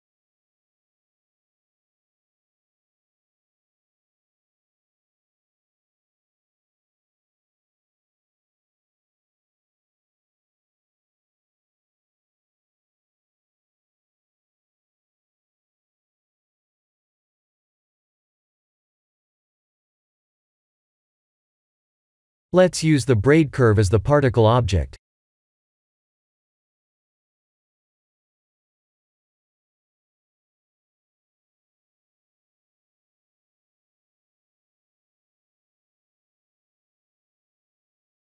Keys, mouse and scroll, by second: 1.0 click, 1.7 click, 6.7 ctrl+space, 7.4-8.5 scroll down 6, 8.6 shift+middle click, 9.4 shift+middle click, 15.3 ctrl+space, 18.1 click, 19.2-19.9 scroll up 1, 19.9 scroll down 1, 19.9-21.1 scroll down 1, 23.9 click, 25.4 click, 26.5 click, 29.8 click, 31.0 click, 33.8 click, 37.4-38.3 scroll up 1.